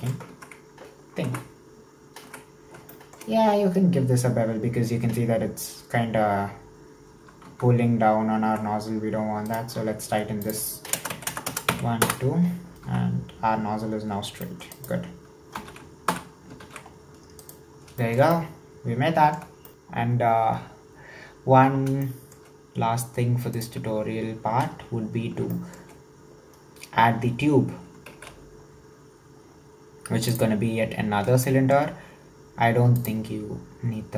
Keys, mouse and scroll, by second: 0.4 Tab, 1.3 Tab, 2.9-5.9 shift+middle drag, 7.6 Tab, 8.5 Tab, 9.4 alt+right click, 10.4-11.4 drag, 11.4 KP_0, 12.9 Tab, 14.1-14.4 scroll down 1, 14.4 middle click, 14.7 right click, 15.6 ctrl+s, 16.2 /, 16.8 ctrl+s, 16.9-17.4 scroll down 5, 17.4 right drag, 18.0-21.6 shift+middle drag, 22.0-22.5 shift+middle drag, 22.5-23.6 scroll up 1, 23.6 right click, 24.0 shift+s, 25.5-28.1 shift+middle drag, 28.1 shift+a, 31.4-33.0 shift+middle drag, 33.0-34.1 drag.